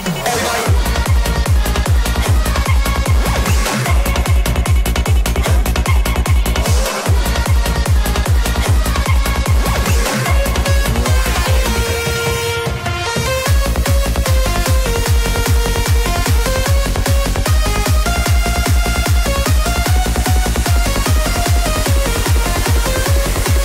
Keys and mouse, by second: 3.8 Tab, 4.5 shift+middle click, 6.2 click, 6.8-8.0 middle drag, 9.1 ctrl+click, 9.6 middle click, 11.5 shift+middle click, 13.9 shift+middle click, 17.0 ctrl+click, 17.6 middle click, 19.7 middle click, 22.0 middle click.